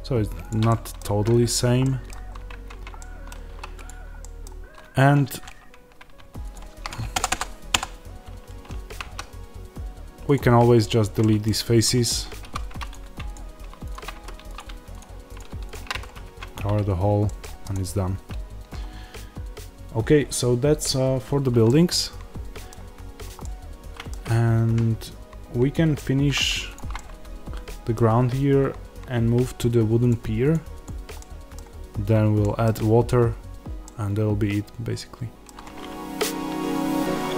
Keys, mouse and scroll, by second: 0.4 click, 0.6-3.8 middle drag, 1.0 Tab, 2.2 scroll up 1, 2.4 Tab, 3.4 3, 3.8 click, 4.2-6.4 middle drag, 6.4 shift+click, 10.2 x, 11.1-12.8 middle drag, 12.3 2, 12.8 click, 14.0 f, 14.5 click, 15.8 f, 16.2 Tab, 16.6-16.9 scroll down 1, 17.2 middle click, 17.5 click, 17.9-20.4 scroll down 1, 21.7-23.1 middle drag, 23.0 scroll down 1, 23.3-26.7 middle drag, 26.7 click, 26.9-30.0 middle drag, 30.0 click, 31.1-36.4 middle drag.